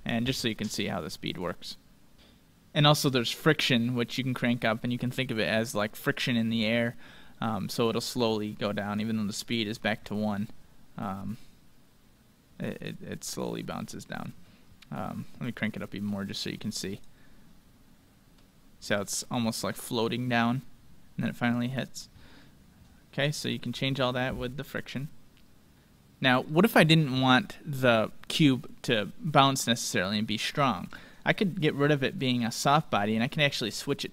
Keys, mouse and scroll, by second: 3.4-5.2 drag, 5.8-7.7 middle drag, 8.9-11.7 drag, 13.2 middle click, 13.6 scroll up 1, 13.8-15.5 middle drag, 15.2-18.5 drag, 19.2-21.1 middle drag, 23.2-25.6 drag, 29.0-31.3 middle drag, 32.3-34.1 drag.